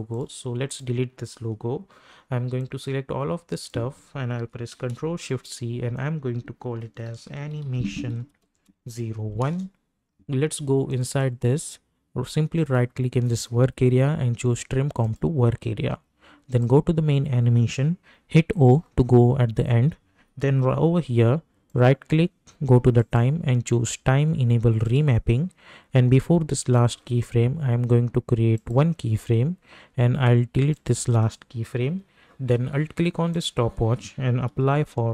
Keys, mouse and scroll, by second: 0.1-5.2 drag, 5.2 ctrl+shift+c, 6.6-9.1 typing, 9.4 Return, 10.1-10.9 scroll up 1, 10.9 click, 12.6 right click, 15.0 click, 18.5 o, 21.7 right click, 23.0 click, 28.7 click, 30.9 click, 34.2-35.1 typing.